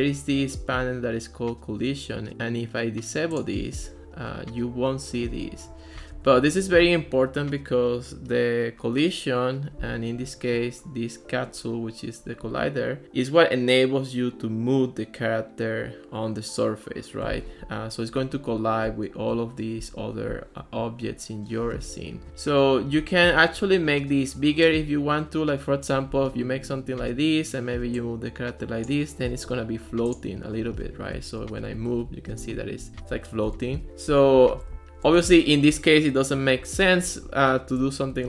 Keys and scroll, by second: 6.0 super+z, 31.0-35.8 typing, 36.8-38.2 typing.